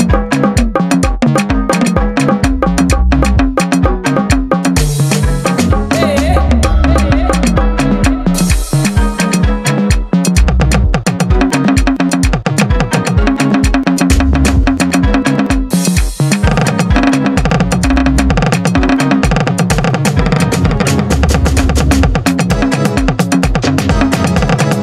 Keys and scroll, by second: 0.7 KP_4, 1.1 KP_Divide, 1.7 KP_Divide, 2.3 KP_6, 2.5 KP_4, 3.9 KP_6, 4.1 KP_4, 4.5 KP_6, 6.3 KP_4, 6.7 KP_6, 7.3 KP_Divide, 7.5 KP_4, 7.9 KP_6, 10.5 KP_2, 11.9 KP_5, 12.3 KP_2, 13.9 KP_5, 14.7 KP_5, 15.1 KP_5, 16.5-24.8 typing.